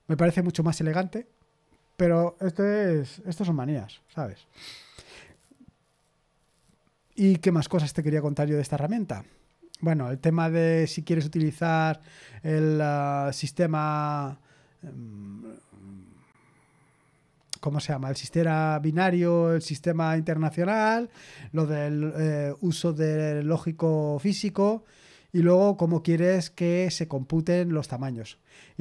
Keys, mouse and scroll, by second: 7.5-9.3 scroll down 1, 9.3-21.9 scroll down 1, 24.5-27.3 scroll down 1, 27.3-28.8 scroll down 1.